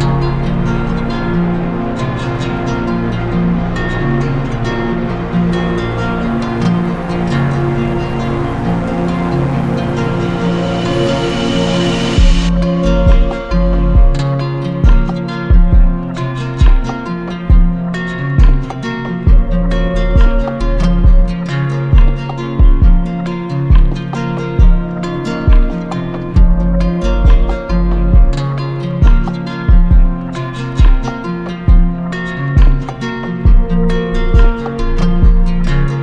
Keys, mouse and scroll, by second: 0.9 click, 1.5 z, 2.4 click, 3.8 click, 5.8 shift+click, 17.9 alt+click, 19.3 click, 20.8 click, 21.8 click, 22.2 z, 23.3 click, 31.6 click, 32.7 click, 33.4 click.